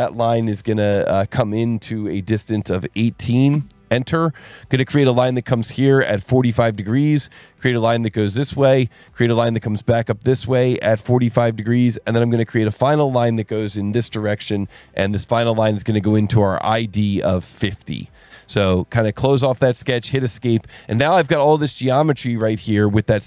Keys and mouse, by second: 2.8 KP_1, 2.9 KP_8, 3.5 KP_Enter, 6.3 click, 8.8 click, 11.3 click, 16.3 click, 18.7 click, 19.5 Escape.